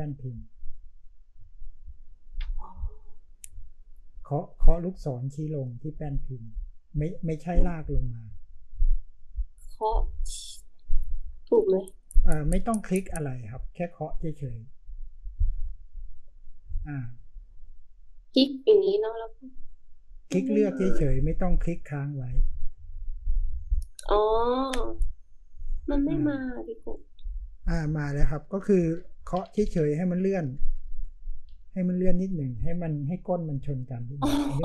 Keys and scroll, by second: 28.6 Up, 28.9 Down, 29.3 Down, 29.5 Down, 29.7 Down, 30.3 Up, 30.5 Up, 30.7 Up, 30.9 Up, 31.5 Down.